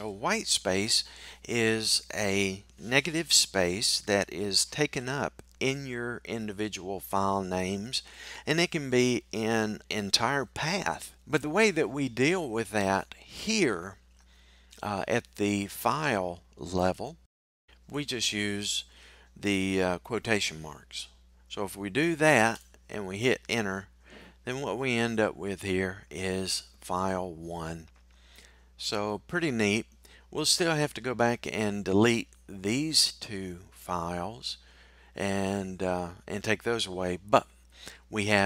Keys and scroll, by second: 17.2 typing, 25.0 typing.